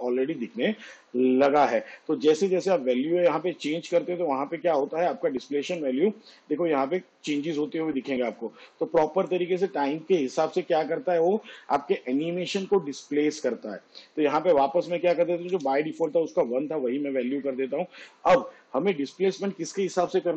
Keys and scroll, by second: 15.6 1.